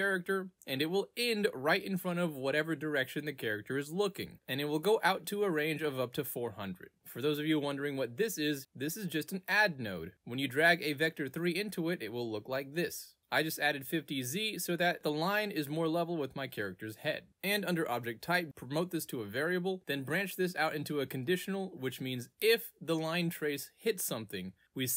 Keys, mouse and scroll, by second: 0.9 click, 3.0 click, 3.8 click, 5.6 click, 7.9 click, 8.5 click, 8.8 right click, 9.4 Return, 10.9 click, 13.1 click, 13.8 click, 14.3 click, 15.0 e, 17.7 click, 18.0 right click, 19.7 click, 20.5 click, 24.8 click.